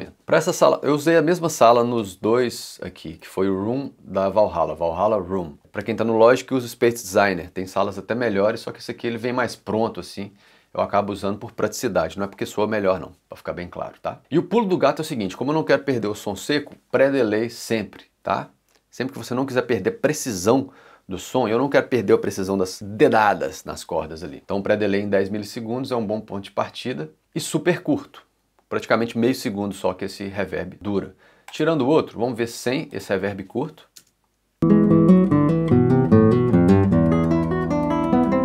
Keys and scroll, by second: 3.6 l, 34.0 space.